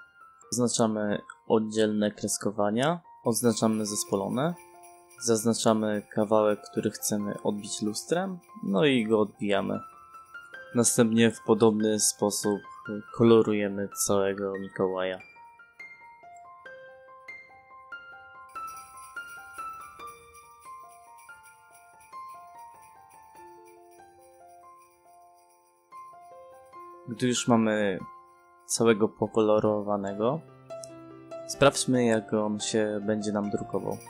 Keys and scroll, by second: 8.9 w, 9.2 space, 15.6 space, 17.0 Escape, 17.7 h, 17.9 space, 27.0 space, 31.0 ctrl+p.